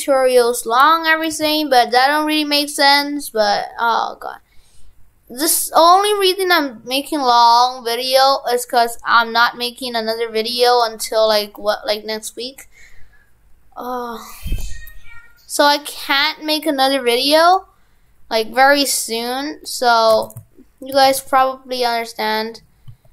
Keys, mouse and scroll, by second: 20.1 shift+f.